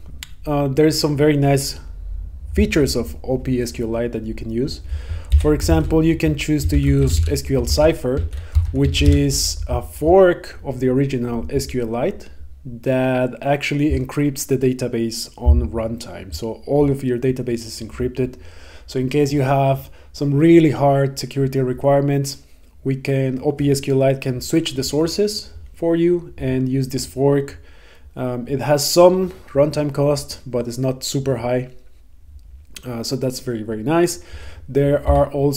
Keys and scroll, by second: 7.8 Right.